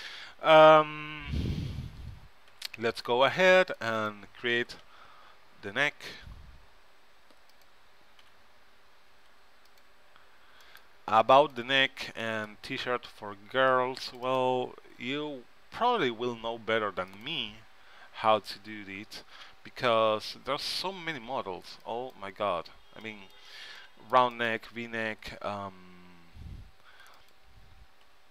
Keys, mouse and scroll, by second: 1.5 a, 2.6 c, 4.2-6.0 right drag, 4.7 g, 8.4 a, 9.2 c, 14.5-17.2 right drag, 15.0 g, 21.3 c, 24.6-26.5 right drag, 25.2 g, 28.1 s.